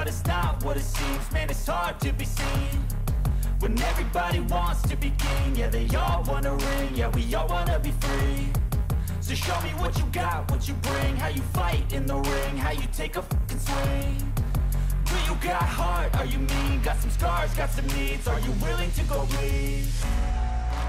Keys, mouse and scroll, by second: 2.2 double click, 10.0 ctrl+j, 13.8 ctrl+t.